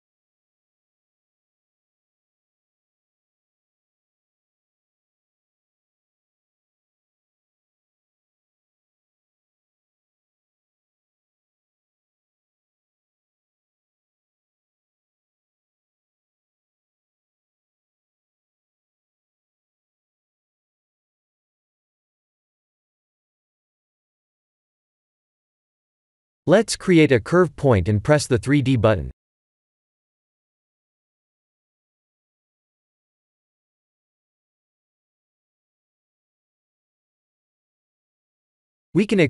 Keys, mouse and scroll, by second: 0.2 Tab, 1.3 click, 1.9 b, 2.8 b, 3.9 g, 5.3 ctrl+z, 5.7 s, 12.1 Tab, 12.9 click, 13.4 middle click, 13.5 middle click, 14.0 shift+z, 15.0 click, 15.5 x, 16.5 Tab, 16.8 click, 17.1 Tab, 17.8 click, 18.2 3, 18.3 click, 19.2 i, 20.2 Tab, 20.8 middle click, 21.8 click, 22.1 right click, 22.9 middle click, 23.1 middle click, 26.0 KP_1, 27.0 click, 27.4 shift+a, 35.0 click, 36.6 click, 39.1 e.